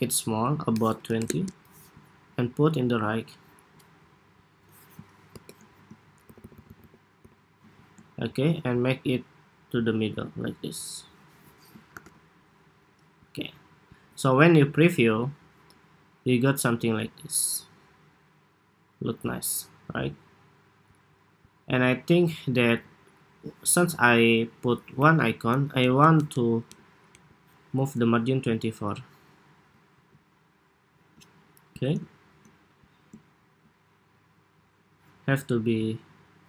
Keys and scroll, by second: 5.9 alt+Left, 6.1 alt+Left, 6.3 alt+Left, 6.4 alt+Left, 6.5 alt+Left, 6.9 alt+Left, 11.8 super+-, 25.9 alt+Down, 26.7 alt+Down, 27.0 alt+Up, 29.6 super+s.